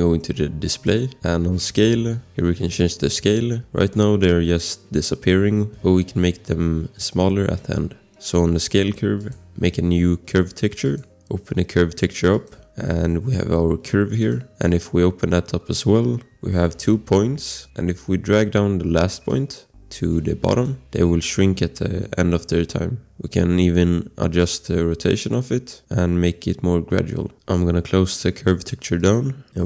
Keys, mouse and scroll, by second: 0.7 click, 9.2 click, 11.0 click, 14.3 scroll, 19.3 click, 24.4 click, 27.3 ctrl+z, 29.0 click.